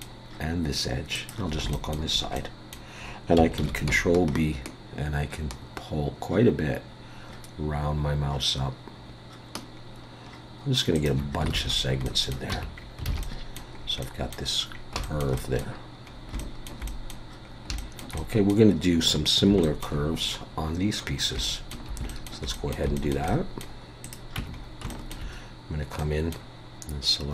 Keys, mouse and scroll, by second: 1.1 shift+click, 1.7 shift+middle click, 2.4 middle click, 3.6 ctrl+b, 11.5 alt+a, 11.7-12.2 scroll down 4, 12.0 middle click, 12.5 Tab, 12.8-13.1 scroll down 2, 13.1 alt+a, 13.2 middle click, 13.8-14.1 scroll up 3, 14.0 middle click, 14.7 scroll down 3, 15.0 shift+middle click, 15.4 middle click, 16.1 scroll up 2, 16.4 shift+middle click, 16.9 middle click, 17.4 scroll up 2, 17.8 shift+middle click, 18.2 middle click, 18.9 scroll down 4, 19.6 shift+middle click, 21.2 scroll up 3, 21.4 shift+middle click, 22.1 shift+middle click, 22.5 middle click, 23.0 shift+middle click, 23.3 middle click, 24.0 click, 24.4 Tab, 24.5 scroll up 3, 24.9 shift+middle click, 26.0 middle click.